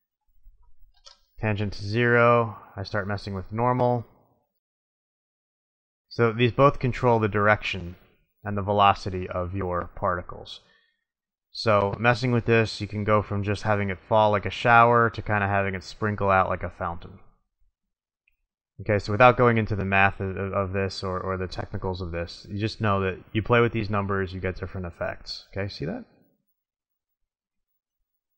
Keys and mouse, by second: 0.7 click, 3.2 click, 3.8-5.3 middle drag, 11.8-13.7 drag, 15.2 click, 19.4-20.4 drag, 24.2 middle click.